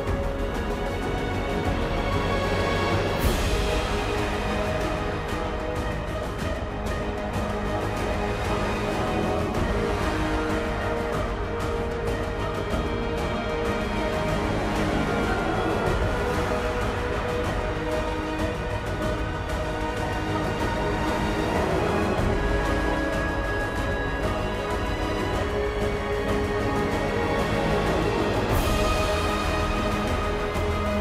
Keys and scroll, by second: 7.5 ctrl+t, 12.7 ctrl+g.